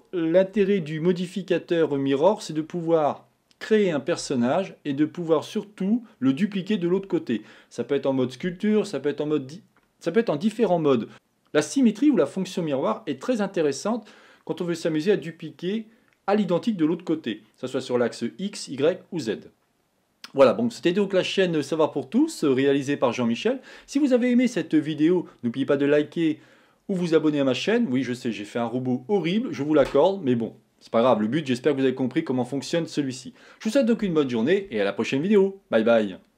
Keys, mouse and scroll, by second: 0.7-3.8 middle drag.